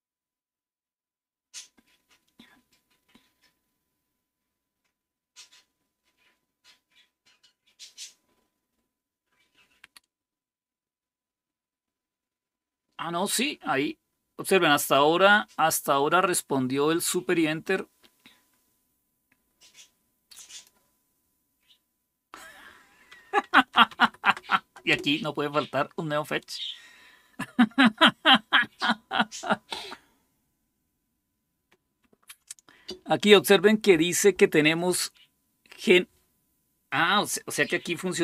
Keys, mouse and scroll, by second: 20.3 click, 23.3-24.2 typing, 24.7 Return.